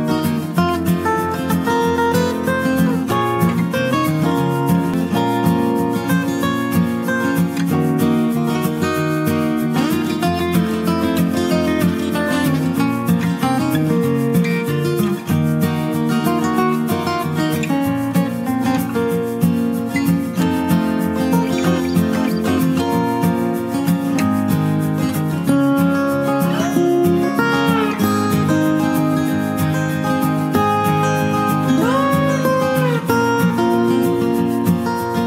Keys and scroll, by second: 1.6 ctrl+i.